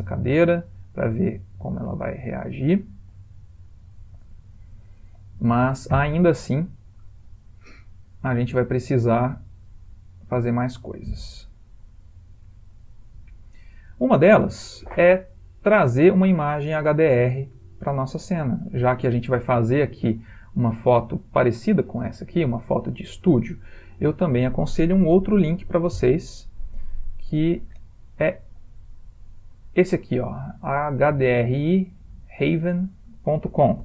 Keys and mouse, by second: 3.1 g, 4.1 middle click, 4.2 middle click, 4.6 middle click, 5.1 ctrl+middle click, 5.2 ctrl+middle click, 6.0 g, 8.2 middle click, 8.4 middle click, 9.1 middle click, 9.4 middle click, 9.9 g, 10.8 middle click, 11.3 middle click, 13.5-14.1 ctrl+middle click, 13.6 ctrl+middle click, 13.7 middle click, 14.1 middle click, 17.3 middle click, 17.4 middle click, 19.7 shift+middle click, 21.9 ctrl+middle click, 21.9 ctrl+middle click, 22.4 ctrl+middle click, 23.1 ctrl+middle click, 23.2 ctrl+middle click, 23.4 ctrl+middle click, 23.6 ctrl+middle click.